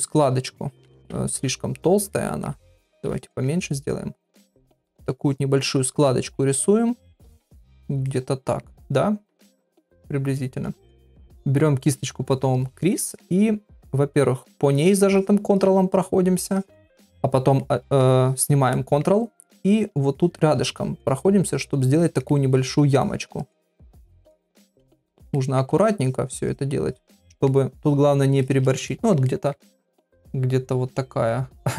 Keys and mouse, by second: 0.0 click, 0.9 ctrl+z, 2.1 middle click, 2.5-3.2 [, 3.2 middle click, 4.6 click, 5.2 click, 5.9 click, 6.4 click, 7.1 click, 7.7 click, 8.1 middle click, 9.4 click, 9.9 click, 13.0 middle click, 14.3 ctrl+click, 14.7 ctrl+click, 15.2 ctrl+click, 15.5 ctrl+click, 16.0 ctrl+click, 16.5 ctrl+click, 17.6 middle click, 18.7 middle click, 19.7 click, 20.1 click, 20.6 click, 21.0 click, 21.5 click, 22.0 click, 22.3 middle click, 23.0 click, 23.4 click, 23.8 click, 24.2 middle click, 24.9 click, 25.4 middle click, 26.1 shift+click, 26.5 shift+click, 26.9 shift+click, 27.3 middle click, 27.8 shift+click, 28.4 shift+click, 28.9 ctrl+middle click, 29.3 middle click, 29.7 ctrl+middle click, 30.2-31.3 middle drag.